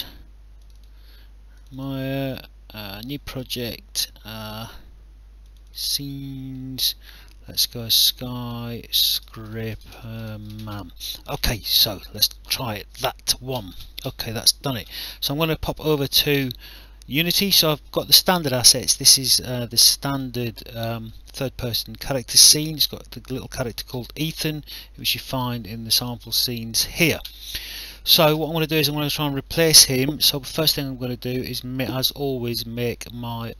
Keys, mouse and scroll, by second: 0.6 click, 2.9 click, 5.4 click, 7.5 click, 9.0-11.2 typing, 12.2 click, 15.5 click, 16.8 alt+click, 19.0 click, 21.4 w, 23.4 click, 25.0 click, 29.2 click, 31.4 click, 31.8 right click, 32.8 click.